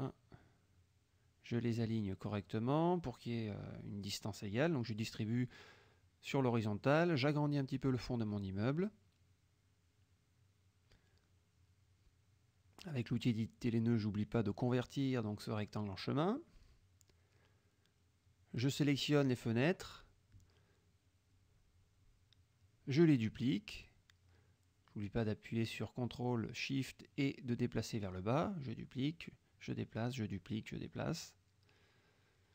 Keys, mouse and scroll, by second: 0.2 ctrl+shift+click, 0.9 shift+click, 5.1 click, 5.9 click, 6.3 click, 7.4-8.7 drag, 9.5-10.2 drag, 11.0-11.9 drag, 12.8 click, 16.3 click, 17.3 click, 17.9 F1, 18.0 click, 18.4-19.3 drag, 20.0 click, 22.7 ctrl+d, 23.0-24.7 ctrl+drag, 25.1 ctrl+shift+d, 25.4-26.4 ctrl+shift+drag, 26.7-28.4 ctrl+shift+drag, 28.9 ctrl+d, 29.2-30.5 ctrl+shift+drag, 31.0 ctrl+d, 31.4-32.4 ctrl+shift+drag.